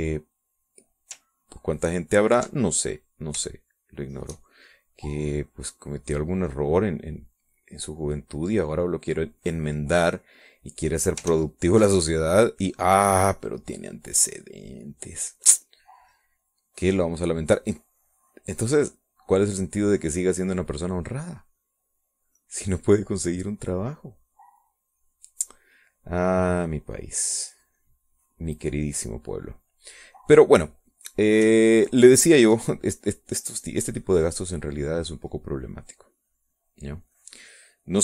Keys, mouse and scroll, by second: 0.6 middle click, 2.7-3.7 ctrl+drag, 4.6 shift+click, 5.8-7.6 shift+drag, 7.7-9.6 drag, 9.7-11.6 drag, 12.4 ctrl+z, 13.0 ctrl+click, 14.4 click, 15.9 click, 16.8-18.1 drag, 18.5-20.6 drag, 20.9 middle click, 22.5 middle click, 22.9-23.5 scroll up 1, 23.5-31.6 drag, 31.7 middle click, 33.4 ctrl+click, 35.2-38.0 drag.